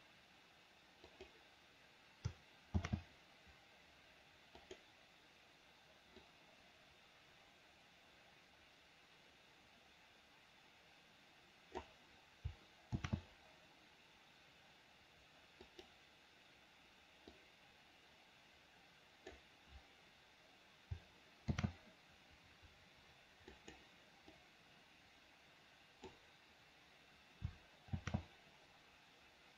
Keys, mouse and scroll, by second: 1.2 click, 3.0 shift+d, 6.5-12.1 drag, 13.2 shift+d, 17.6-19.7 drag, 21.8 shift+d, 24.6-26.4 drag, 28.2 shift+d.